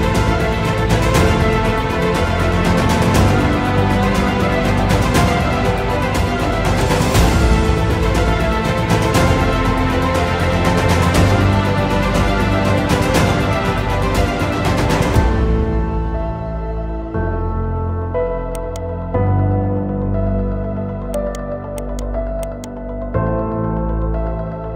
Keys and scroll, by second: 6.9 space, 23.0 Delete.